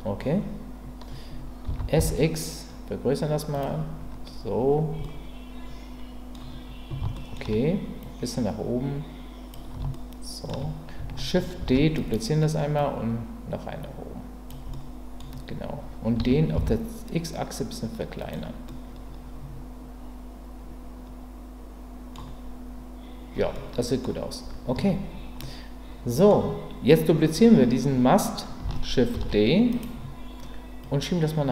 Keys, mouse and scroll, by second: 1.6 s, 2.0 x, 3.5 click, 5.0-6.3 middle drag, 6.3-7.0 scroll down 1, 7.1 shift+middle click, 7.3 shift+scroll down 1, 8.0-9.5 drag, 9.9-10.5 shift+scroll up 1, 10.5 shift+middle click, 11.6 shift+d, 12.8-14.5 drag, 14.7 middle click, 16.2 s, 16.5 x, 18.2 click, 18.6-24.0 middle drag, 24.7 Tab, 25.4-26.3 middle drag, 29.1 shift+d, 29.7-30.8 right drag, 30.8-31.5 drag.